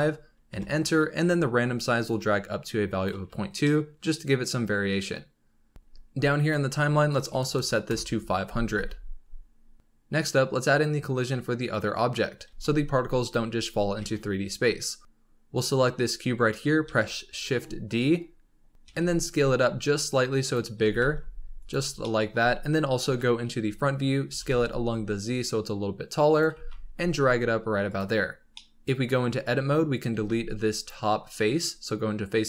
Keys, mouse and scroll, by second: 2.0-3.6 drag, 3.6-5.7 middle drag, 5.7 space, 6.3-7.5 drag, 7.5 KP_0, 8.7 space, 9.5 scroll down 3, 9.8-11.3 middle drag, 12.4 shift+a, 13.9 shift+a, 15.5 click, 16.8 shift+d, 18.0 KP_7, 18.8 s, 20.7 s, 22.0-23.0 middle drag, 23.0 KP_1, 23.8 scroll up 2, 24.2 s, 26.5 g, 28.3 scroll down 3, 28.5-29.1 middle drag, 29.1 scroll up 4, 29.3 Tab, 30.1 3, 30.7 click, 31.3 scroll down 2.